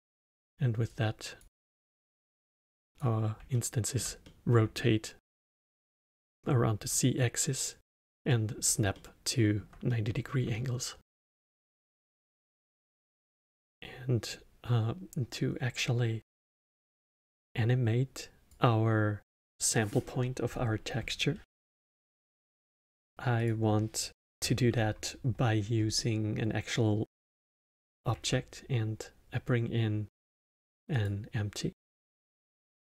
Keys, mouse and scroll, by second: 0.9 click, 1.9 click, 3.5-13.3 alt+middle drag, 13.3-16.3 drag, 23.3-25.9 drag, 25.9-28.0 middle drag, 31.7-32.9 middle drag.